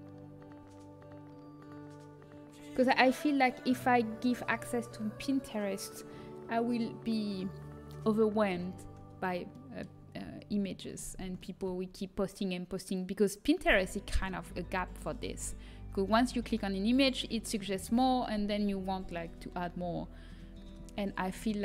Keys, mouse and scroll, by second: 9.1-14.7 middle drag.